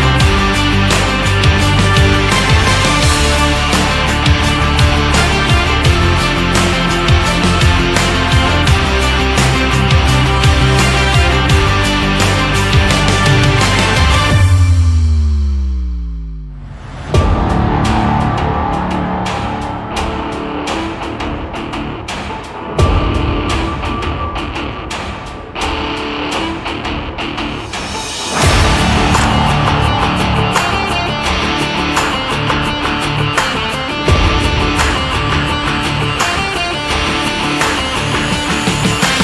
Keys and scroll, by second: 6.6 ctrl+z.